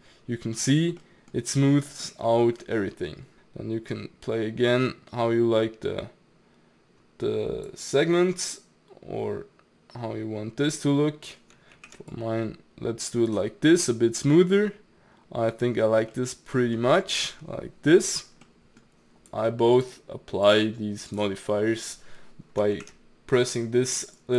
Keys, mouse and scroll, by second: 0.0-3.9 middle drag, 3.9-6.9 drag, 8.4-11.4 drag, 11.8 ctrl+z, 12.1-13.6 drag, 13.6 scroll down 2, 13.8-15.8 middle drag, 15.8 scroll up 2, 16.1-19.2 middle drag, 19.2-22.8 drag, 22.8 ctrl+z, 24.2-24.3 drag.